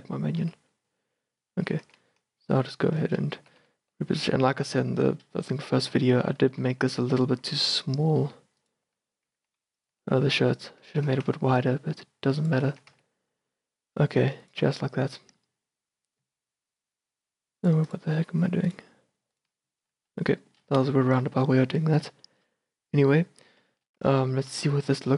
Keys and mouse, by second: 0.0 click, 0.7 Tab, 1.8 g, 3.6 g, 6.7 s, 7.6 s, 9.1 g, 10.1 s, 10.8-12.0 drag, 11.0 g, 12.9 a, 13.3 Tab, 19.5 click, 20.0-20.8 middle drag, 20.8 a, 23.8 middle drag, 24.6 z.